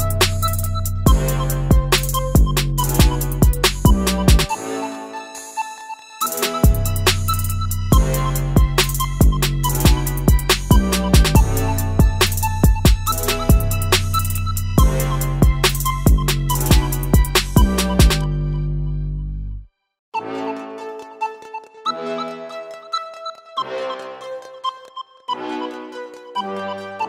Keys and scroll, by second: 5.3 Delete, 6.0 Delete, 16.9 ctrl+z, 21.9 ctrl+z.